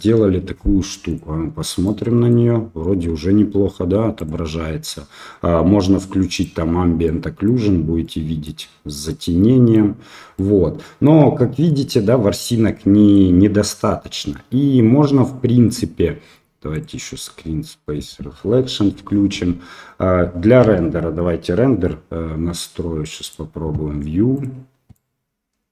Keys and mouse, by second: 1.8 middle click, 1.9 click, 6.3 click, 7.0-7.4 middle drag, 8.0-8.4 middle drag, 9.1-9.7 middle drag, 9.7 click, 10.3 middle drag, 10.5 click, 10.6-11.0 middle drag, 11.8-13.1 middle drag, 17.0-20.6 drag, 20.6 KP_0, 23.2 click, 24.3 click, 24.9-25.7 middle drag.